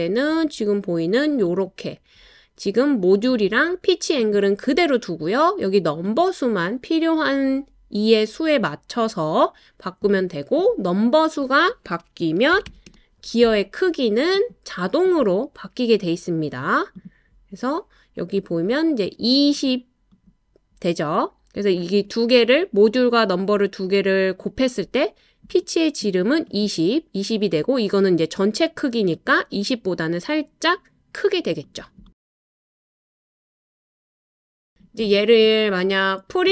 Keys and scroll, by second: 12.3-13.2 typing.